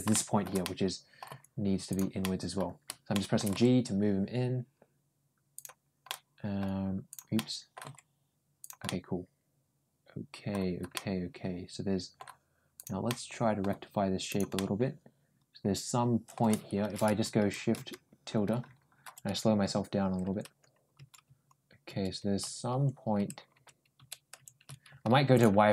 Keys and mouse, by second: 0.4 middle click, 1.1 g, 2.0 middle click, 3.0 middle click, 3.4 g, 5.9 middle click, 6.9 click, 7.2 middle click, 7.7 g, 8.7-10.4 middle drag, 10.8-12.0 middle drag, 12.6 click, 12.9 middle click, 14.1 click, 14.4-16.2 middle drag.